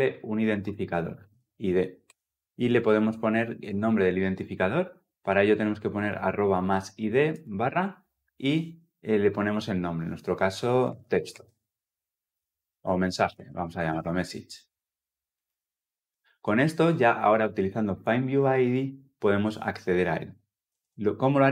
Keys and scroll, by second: 0.0 ctrl+b, 2.0 Return, 19.6 ctrl+alt+Left, 20.7 Tab.